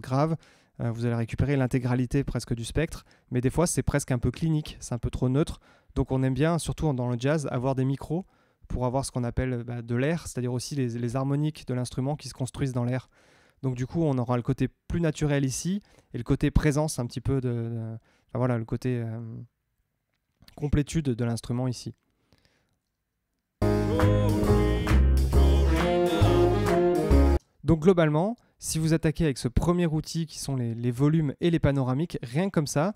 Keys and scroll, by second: 23.5 space, 27.3 space.